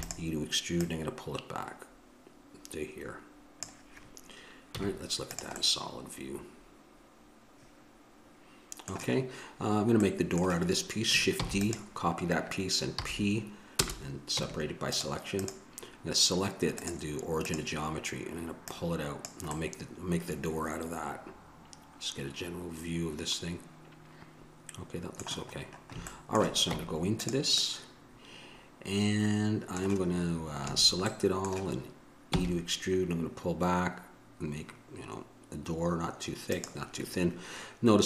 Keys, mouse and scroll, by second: 7.0 middle click, 9.9 middle click, 11.6 shift+d, 13.2 p, 14.6 Tab, 15.6-17.7 right drag, 17.7 click, 19.8-21.2 middle drag, 22.5-23.7 middle drag, 25.8-26.8 middle drag, 26.8 Tab, 30.8 a, 31.3-36.7 middle drag.